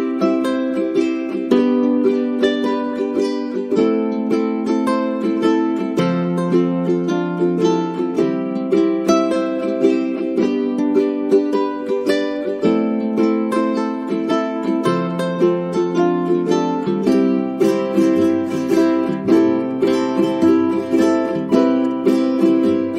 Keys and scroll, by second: 11.1 space, 14.4 space, 19.7-21.8 typing.